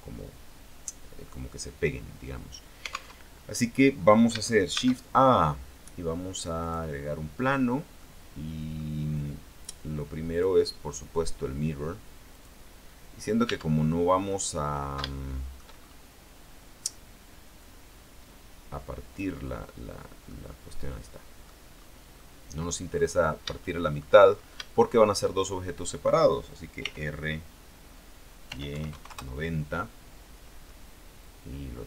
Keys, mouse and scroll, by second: 3.3 alt+Tab, 4.9 shift+a, 6.8 click, 7.6-8.1 scroll down 2, 8.1 middle click, 9.1-10.5 scroll down 2, 10.5 click, 12.5 click, 13.6 Tab, 14.5 middle click, 15.3 shift+middle click, 17.7-19.5 drag, 19.5-19.8 scroll down 2, 19.8 click, 21.0 click, 22.2 scroll down 2, 22.3 click, 23.5-25.1 scroll up 9, 23.7 shift+click, 24.9 shift+middle click, 26.9 r, 28.6 y, 28.9 KP_9, 29.1 KP_0, 29.2 KP_Enter, 30.3-31.3 scroll down 2, 31.3-31.8 drag.